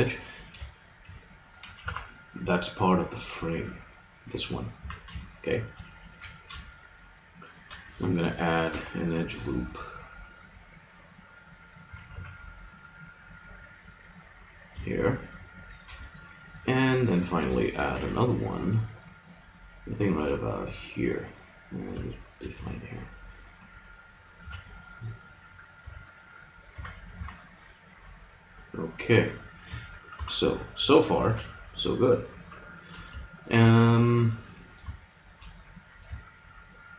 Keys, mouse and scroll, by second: 0.6 middle click, 1.8 z, 3.5-5.3 middle drag, 4.8 z, 6.1 a, 8.7 ctrl+r, 12.1 g, 15.3 click, 15.7 middle click, 16.5-17.9 middle drag, 17.9 ctrl+r, 20.8 middle click, 22.5 a, 23.1-25.0 middle drag, 24.4 a, 25.8 a, 26.7 Tab, 27.2 z, 30.1 KP_3, 31.3 a, 32.4 z.